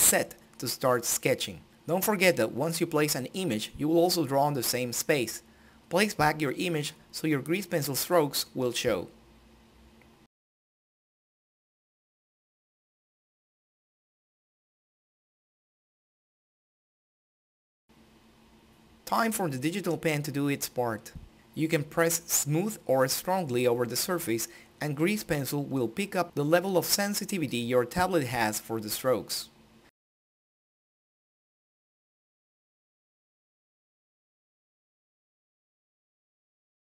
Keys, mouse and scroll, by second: 1.2 Return, 2.7-5.6 drag, 5.6 middle click, 6.5 ctrl+middle click, 7.4 click, 8.6 click, 10.0 click, 10.6 click, 11.4 n, 11.7 click, 12.6 n, 13.0 click, 13.7 middle click, 14.7 click, 15.1 Escape, 15.6 click, 19.6-30.0 drag, 30.0 ctrl+middle click, 31.2 shift+middle click, 31.7-35.4 drag, 35.4 ctrl+z, 35.5 click, 36.0 ctrl+z, 36.1 click.